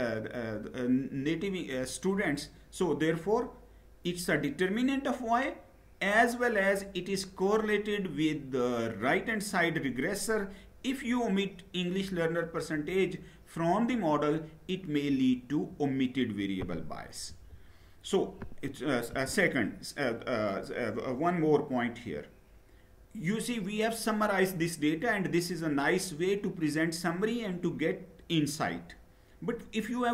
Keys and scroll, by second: 17.0 Down, 18.8 Up.